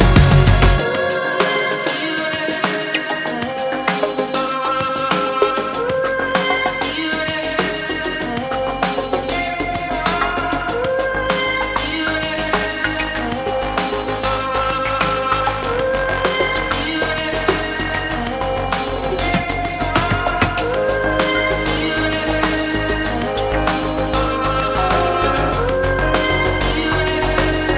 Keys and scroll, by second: 4.1 space, 27.2 space.